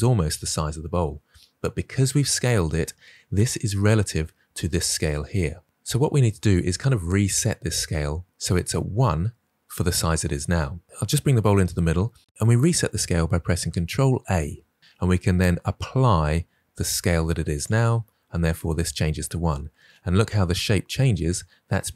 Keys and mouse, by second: 14.1 ctrl+a.